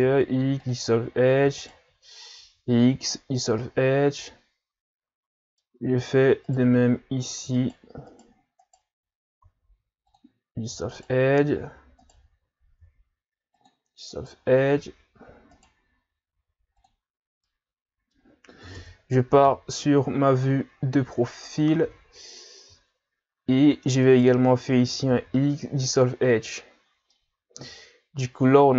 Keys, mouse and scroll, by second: 0.0 x, 1.2-1.6 scroll up 1, 1.6 alt+right click, 2.4 x, 3.6-6.5 middle drag, 6.5 alt+right click, 7.6 alt+right click, 8.1 alt+right click, 8.6 alt+right click, 9.4 x, 10.9 alt+right click, 12.0 alt+right click, 12.8 x, 15.6 alt+right click, 16.3 x, 17.2 scroll down 4, 17.4-18.8 middle drag, 18.8 KP_1, 19.4 KP_3, 20.8-21.1 scroll up 4, 21.8-22.3 scroll down 3, 24.1 alt+right click, 25.1 x, 26.8 scroll down 3, 27.1-28.7 middle drag.